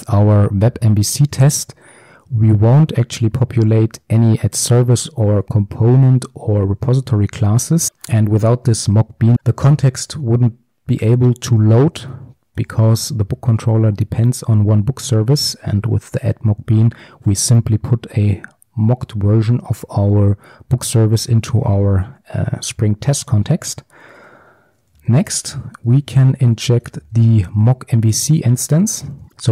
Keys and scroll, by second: 1.3 ctrl+alt+Left, 12.8 ctrl+b, 15.2 ctrl+b, 15.2 ctrl+alt+Left, 26.1 Return.